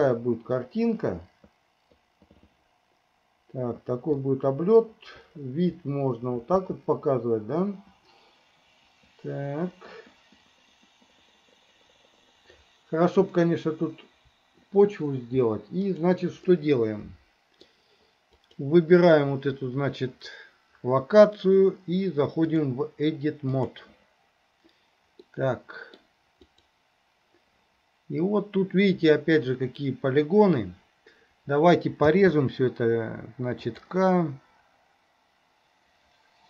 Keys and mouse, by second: 16.6-17.7 middle drag, 18.4 click, 22.6-24.4 drag, 25.3 middle click, 26.5 click, 32.1 k.